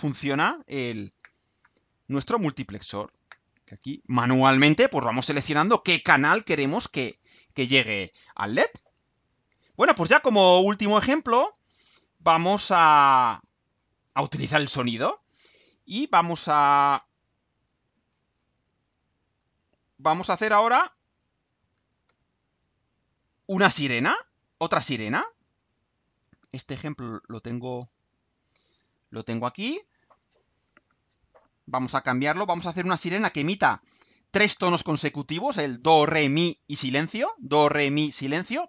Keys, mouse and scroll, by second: 9.7 click, 11.5 click, 12.5 click, 13.0-13.7 scroll down 4, 14.2-14.6 scroll down 2, 15.2 scroll down 2, 15.9-17.0 scroll down 4, 17.7-18.6 scroll down 4, 18.8-19.6 scroll down 4, 20.5 scroll up 2, 24.6 click, 27.4 click.